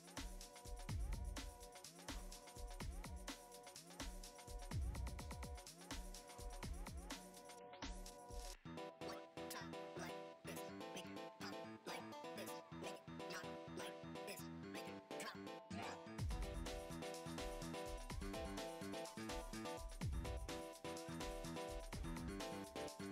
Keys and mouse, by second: 0.5 Tab, 1.4-2.0 drag, 2.1-2.7 shift+middle drag, 2.7 ctrl+b, 5.5 middle click, 5.8 shift+middle click, 6.8-7.9 drag, 8.0 middle click, 8.8 click, 10.1 e, 10.9 ctrl+Tab, 11.9 shift+middle click, 13.2 middle click, 13.7-14.8 drag, 15.2-16.2 drag, 16.5 click, 17.6 middle click, 18.2 drag, 18.5-18.8 shift+middle drag, 18.9-20.2 drag, 20.9-21.4 drag, 21.8 click, 22.5 ctrl+Tab.